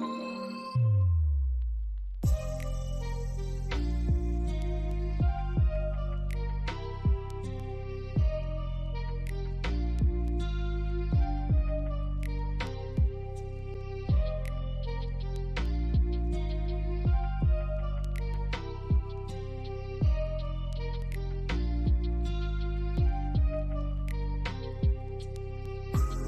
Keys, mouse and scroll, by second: 2.6 double click, 3.0 alt+middle click, 3.3 alt+click, 4.0 right click, 11.4 scroll up 1, 12.4 alt+click, 19.4 ctrl+click, 24.5 ctrl+click.